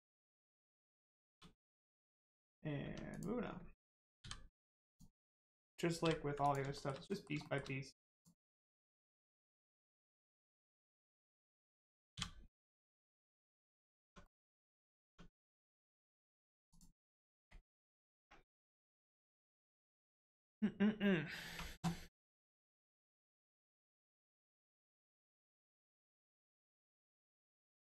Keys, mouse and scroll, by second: 0.6 click, 0.8 scroll down 1, 1.1 shift+middle click, 1.7 scroll up 1, 2.8 Tab, 3.0 click, 3.4-4.2 scroll down 1, 4.8 click, 6.7 shift+middle click, 7.0 middle click, 7.1 middle click, 7.4 shift+middle click, 8.1 click, 8.5 middle click, 12.8 middle click, 14.0 Tab, 14.2 middle click, 14.6-15.6 scroll up 1, 15.6 middle click, 16.6 click, 23.5 click.